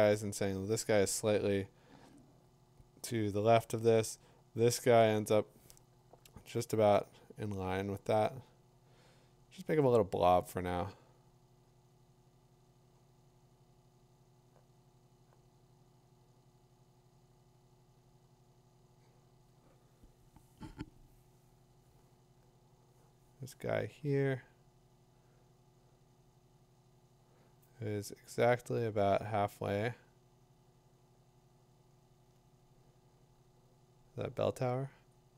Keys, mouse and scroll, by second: 2.6-12.9 drag.